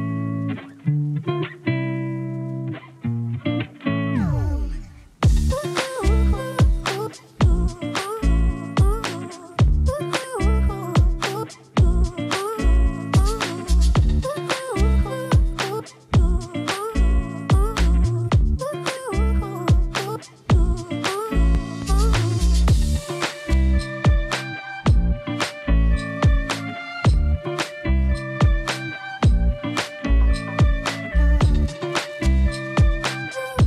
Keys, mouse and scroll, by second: 0.8 scroll up 1, 1.1 space, 1.3 click, 1.6 space, 3.4 click, 3.4 click, 6.3-8.2 typing, 9.1 click, 11.5-12.8 typing, 13.6-25.8 drag, 25.8 typing, 29.9-31.7 typing, 32.4 shift+Return, 33.0-33.6 typing.